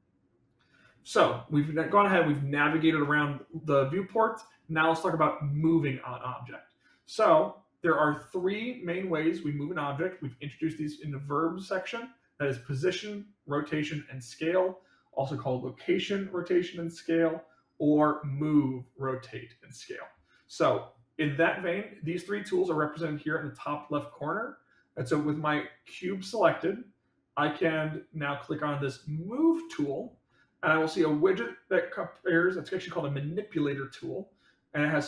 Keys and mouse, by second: 25.4 middle click, 26.2 middle click, 29.7 click, 30.8-32.3 middle drag.